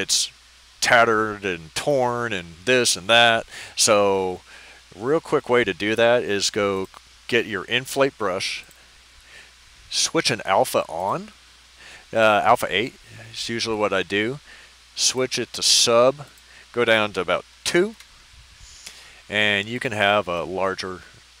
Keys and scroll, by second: 17.6 2, 17.9 Return.